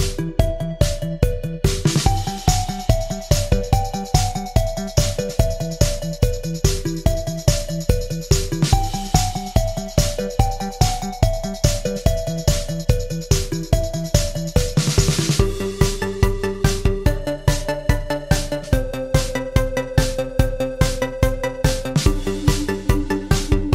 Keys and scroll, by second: 0.8 BackSpace, 0.9 BackSpace, 9.1 Escape, 22.9 Escape.